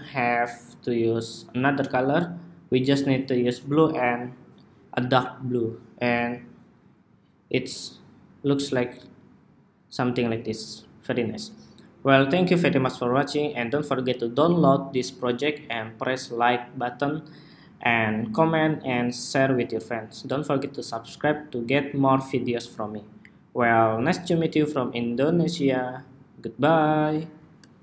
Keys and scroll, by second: 12.8 super+s, 27.6 shift+super+2.